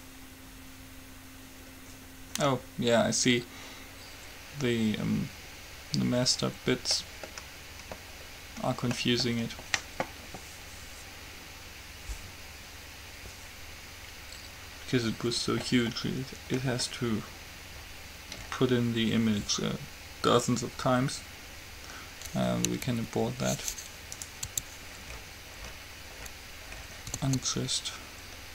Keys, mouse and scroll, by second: 7.3-22.1 middle drag, 24.3-25.3 right drag, 24.6 Tab, 27.3 a, 27.6 a.